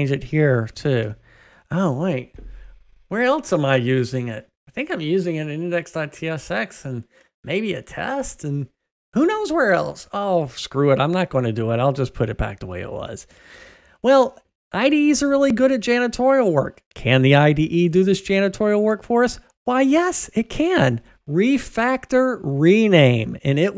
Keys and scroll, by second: 11.5 super+z, 21.4 ctrl+alt+shift+t, 22.9 shift+F6.